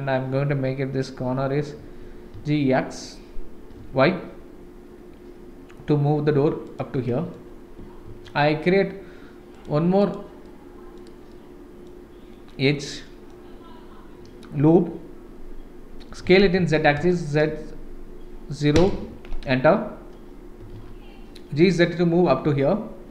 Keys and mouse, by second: 1.8 g, 7.0 middle click, 8.0 ctrl+r, 10.4 middle click, 11.3 middle click, 12.9 middle click, 14.4 middle click, 16.2 s, 20.6 g.